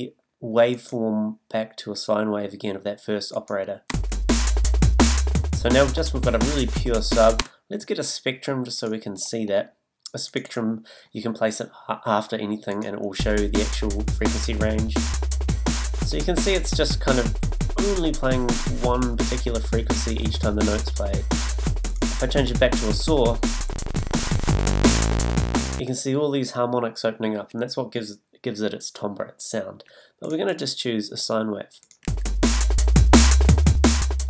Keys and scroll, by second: 3.9 space, 7.4 space, 13.1 space, 25.8 space, 32.0 space.